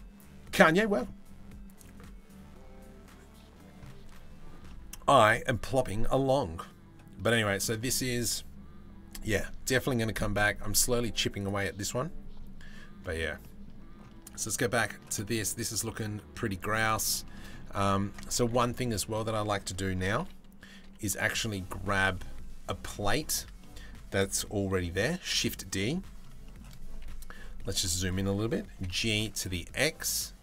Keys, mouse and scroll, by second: 13.0 middle click, 13.8 Tab, 14.0 middle click, 14.8 shift+middle click, 15.0 middle click, 15.7 middle click, 16.3 Tab, 16.6 middle click, 16.8 middle click, 17.6 Tab, 18.0 3, 18.3 click, 19.8 KP_3, 20.4 KP_1, 21.5 middle click, 22.3 middle click, 22.8 shift+middle click, 23.2 middle click, 24.6 shift+d, 25.4 middle click, 26.0 middle click, 26.6 KP_Decimal, 27.2 middle click, 28.3 g.